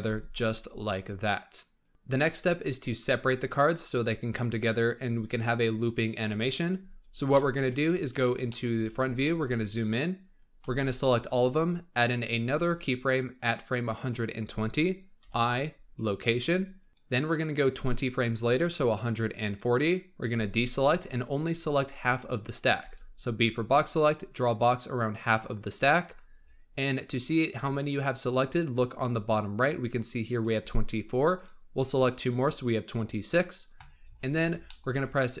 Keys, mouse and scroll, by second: 0.0 space, 0.2-4.2 middle drag, 6.6-7.3 scroll up 3, 7.3 shift+middle click, 7.7-8.4 scroll up 6, 8.4-8.8 shift+middle drag, 8.8 scroll up 2, 9.2-10.3 shift+middle drag, 10.3 scroll down 3, 10.5 b, 12.7-15.1 drag, 15.1 i, 16.9-20.4 drag, 20.4 alt+a, 22.7 b, 26.0-26.7 scroll up 6, 32.1 shift+click, 33.5-34.6 scroll down 14, 34.6-35.4 shift+middle drag.